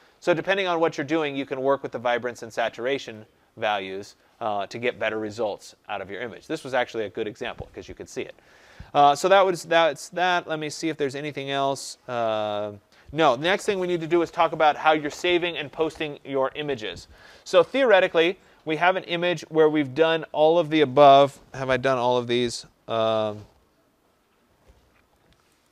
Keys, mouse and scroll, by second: 2.2 click, 3.6 click, 17.2 click, 18.8-22.3 drag, 25.5-25.7 drag.